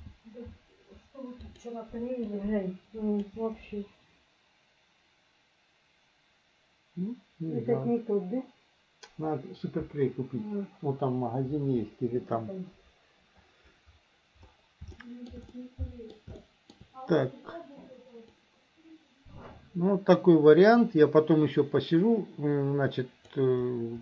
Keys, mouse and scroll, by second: 2.3-3.3 drag, 15.0 shift+middle click, 15.6 middle click, 16.4 shift+middle click, 18.4-23.4 drag.